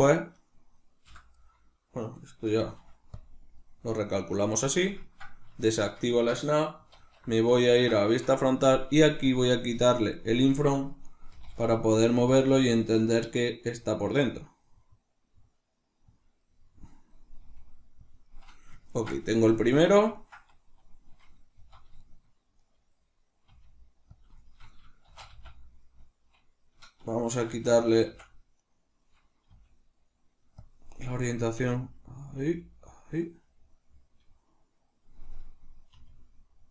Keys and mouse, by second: 0.3 right click, 1.1 l, 1.5-9.3 middle drag, 2.6 shift+n, 5.7 shift+Tab, 7.0 alt+q, 9.3-11.3 drag, 11.3 g, 12.3 click, 12.5 g, 16.2 click, 16.4-18.2 middle drag, 17.4 g, 18.2 click, 18.8-24.3 ctrl+middle drag, 21.6 z, 23.5 g, 24.3 click, 24.4-28.7 shift+middle drag, 25.1 shift+d, 28.7 right click, 29.5 g, 30.7 click, 31.1-32.3 middle drag, 31.6 r, 32.3 click, 32.5 g, 33.0 click, 33.1-36.7 middle drag, 35.9 r.